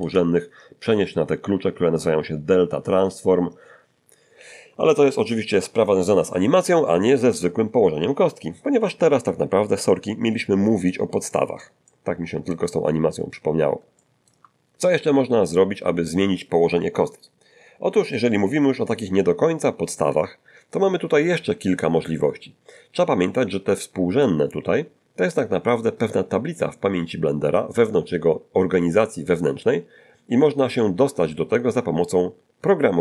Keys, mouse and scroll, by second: 0.0 Return, 9.6-11.0 middle drag, 11.3 middle click, 11.8 middle click, 12.7-13.3 scroll up 1, 13.4-13.7 scroll up 1, 14.0 shift+middle click.